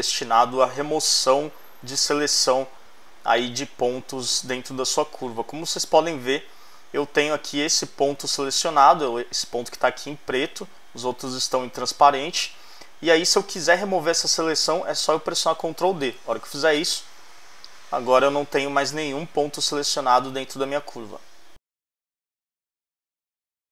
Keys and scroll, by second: 16.1 super+d.